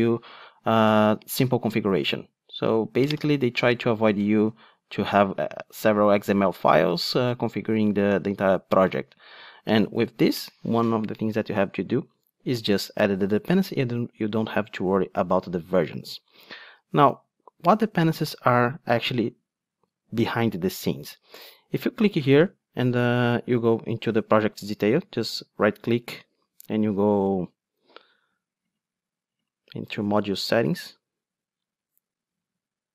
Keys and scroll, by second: 25.0 super+Down.